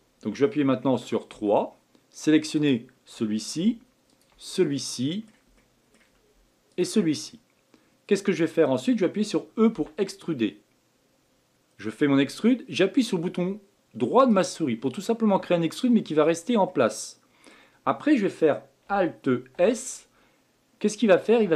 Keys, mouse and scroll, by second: 2.5 click, 4.1 shift+click, 4.6-6.0 middle drag, 6.0-6.7 scroll up 1, 6.7 shift+click, 7.3-9.7 middle drag, 9.7 e, 15.0-19.5 middle drag, 19.5 alt+s.